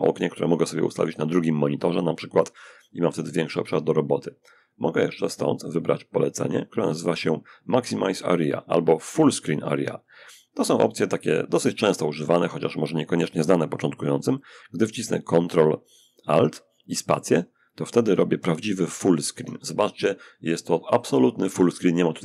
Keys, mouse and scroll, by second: 2.9 click, 4.1 click, 17.9 ctrl+alt+space.